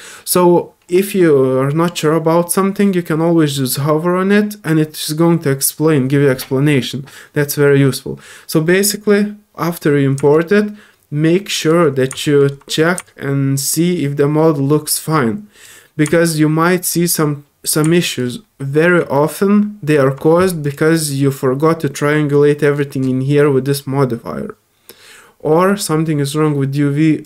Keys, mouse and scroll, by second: 8.4 scroll up 1, 8.4 typing, 8.7 middle click, 10.3-11.7 drag, 12.2 alt+click, 13.0-15.6 drag, 16.1 alt+click, 17.9 alt+click, 19.4 click, 20.6 alt+click, 27.2 click.